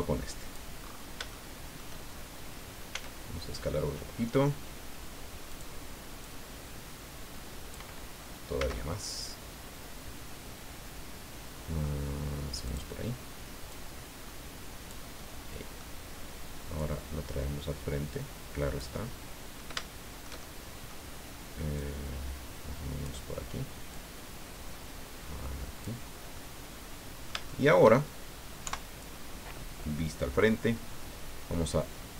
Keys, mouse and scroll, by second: 0.8-1.2 scroll up 1, 1.3 shift+middle click, 2.0 shift+scroll up 2, 2.9 s, 5.5 click, 6.2-7.9 drag, 8.6 s, 12.6 click, 13.7-15.1 drag, 15.2 middle click, 16.8-19.8 drag, 19.8-21.1 shift+middle drag, 21.8-23.2 drag, 23.9-26.1 drag, 26.2 scroll down 2, 26.4-28.0 middle drag, 28.6 KP_1.